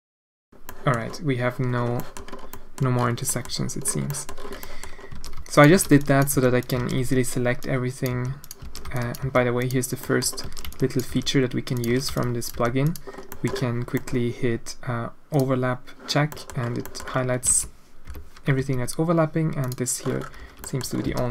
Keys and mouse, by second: 0.2 Tab, 0.3 Tab, 0.4 alt+a, 0.7 click, 2.1 middle click, 2.5 middle click, 3.4 middle click, 4.2 click, 4.6 click, 5.1 alt+a, 5.3-7.0 typing, 5.7 alt+a, 6.8 alt+a, 8.1 g, 8.7 alt+a, 8.8 b, 9.2 g, 10.1 click, 10.4 alt+a, 10.6 b, 11.1 g, 11.9 alt+a, 12.1 b, 12.5 g, 13.4 click, 13.9 click, 15.3 click, 16.3 middle click, 16.9 middle click, 17.5 alt+a, 18.1 l, 18.6 g, 20.4 a, 20.7 click, 21.1 alt+a.